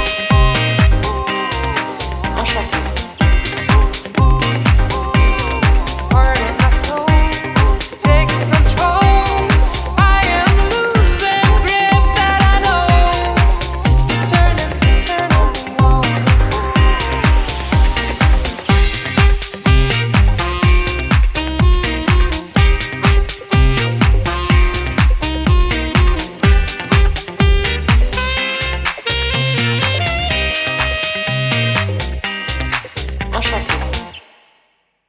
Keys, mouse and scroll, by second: 6.6 click, 8.4 click, 11.3 click, 14.8 click, 17.9-18.4 scroll down 3, 18.2 middle click, 18.9 middle click, 20.0 KP_1, 20.5-20.9 scroll down 2, 21.1 KP_1, 21.9 scroll down 6, 22.3 middle click, 22.7 scroll down 3, 23.1 middle click, 23.5-24.0 scroll down 3, 23.9 scroll up 5, 24.1 middle click, 24.6-26.1 scroll up 11, 25.4 middle click, 26.8-27.2 scroll up 3, 27.7 scroll down 3, 27.8 middle click, 28.4 scroll down 5, 28.7 scroll up 1, 29.0 scroll down 2, 29.3-29.8 scroll up 9, 31.3 click, 33.8 click.